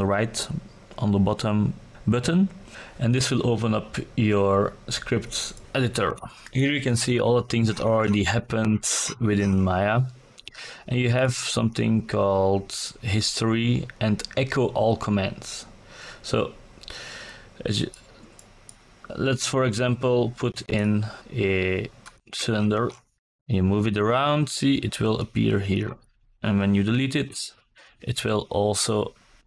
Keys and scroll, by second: 18.7 w, 23.9 Delete.